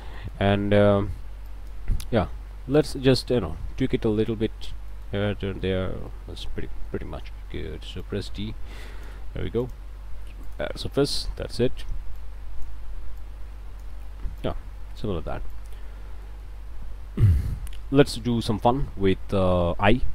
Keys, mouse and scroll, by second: 0.2 click, 1.5 click, 2.7 click, 3.2-4.9 drag, 4.9 middle click, 5.5 middle click, 5.7 click, 5.7 a, 6.1 click, 7.3 d, 8.0-9.2 drag, 9.6 alt+click, 10.1 alt+q, 10.4 alt+click, 11.0 alt+click, 12.2 click, 13.2 click, 14.4 click, 15.5 click, 16.1 scroll up 1, 16.3 click, 16.7 a, 17.0-18.6 shift+drag, 19.5 d.